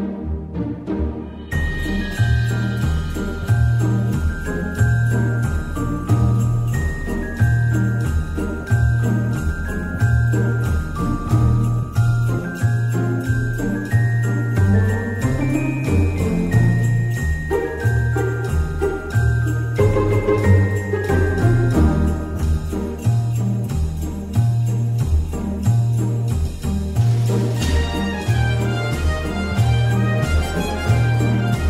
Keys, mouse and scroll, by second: 3.2 w, 4.5-6.3 typing, 5.9 Caps_Lock, 7.8 t, 11.0-12.4 typing, 14.4 Return, 18.4 Return, 18.6 Left, 18.9 Right, 19.1 Right, 19.3 Right, 20.0 BackSpace, 20.7 i, 21.7 Return, 22.7-23.4 typing, 23.7 Caps_Lock.